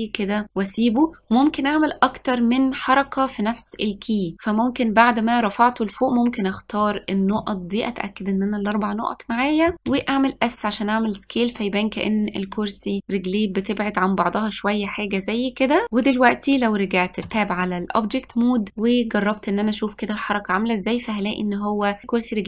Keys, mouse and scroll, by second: 5.8 click, 7.5-9.8 middle drag, 10.0 s, 17.4 Tab, 19.7-22.0 drag.